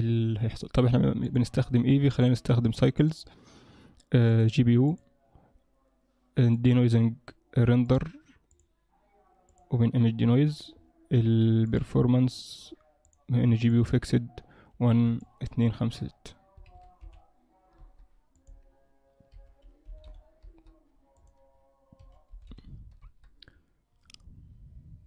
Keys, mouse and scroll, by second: 1.2 click, 2.1 click, 4.7 click, 8.0 click, 10.4-11.7 scroll down 10, 11.7 click, 11.7-12.4 scroll down 2, 13.0 click, 15.3 shift+click, 21.2 click.